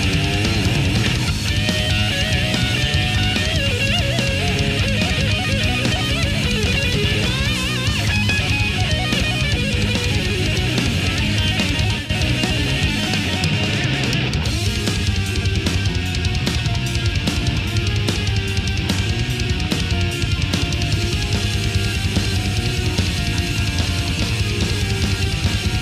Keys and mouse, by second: 0.6 click, 1.3 click, 2.5-4.4 drag, 4.8-9.1 drag, 16.1 click, 17.8-20.1 drag, 20.7-22.6 drag, 22.9-24.2 drag.